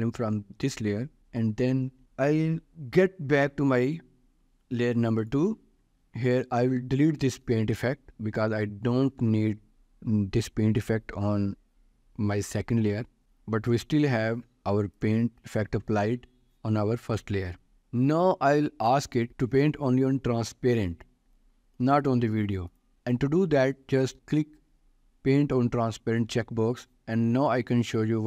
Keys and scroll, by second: 1.2 ctrl+s, 13.1 Delete, 24.2 ctrl+s.